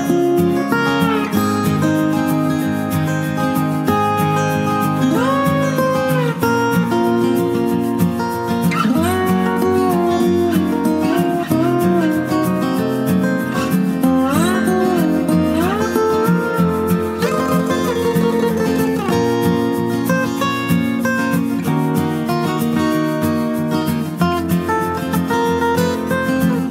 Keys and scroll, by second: 0.0-0.6 typing, 3.1 Return, 6.2-7.3 typing, 8.6 BackSpace, 8.9 BackSpace, 11.5-13.0 typing, 15.4 ctrl+z, 20.7 ctrl+space.